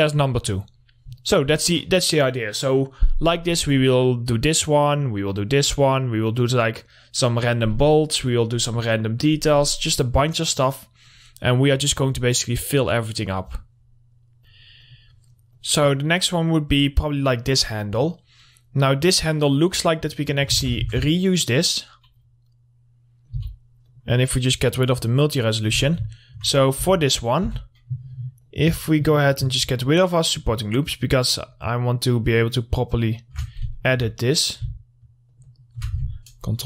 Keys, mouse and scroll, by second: 0.7-3.2 drag, 3.2-3.6 scroll up 1, 3.6 click, 4.2 scroll up 1, 4.5 click, 6.1 scroll down 1, 10.5-13.7 drag, 13.7-15.1 drag, 16.5 click, 16.9-18.1 scroll up 1, 18.1 click, 19.7 middle click, 20.7 ctrl+c, 21.1 ctrl+v, 21.4-23.5 drag, 23.5 z, 24.1 click, 25.7 middle click, 25.9 Tab, 26.3 alt+middle click, 26.7 scroll up 1, 27.0 2, 27.1 middle click, 27.7 2, 27.9-28.6 scroll up 1, 28.6 click, 29.0 middle click, 29.3 scroll up 1, 29.7 alt+click, 33.7 shift+scroll down 2, 33.9 alt+middle click, 34.6 scroll up 1, 35.5 alt+shift+click, 35.6 alt+shift+click.